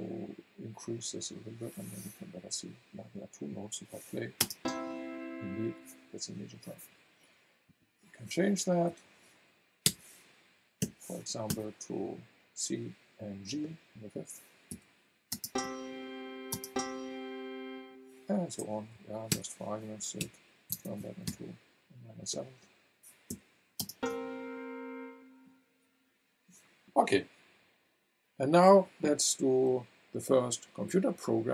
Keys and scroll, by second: 4.4 space, 8.5 Right, 8.9 Left, 9.8 BackSpace, 10.8 7, 11.5 Return, 14.7 v, 15.3 space, 18.4 Right, 18.9 Left, 19.3 BackSpace, 20.7 KP_0, 21.2 Return, 23.8 space.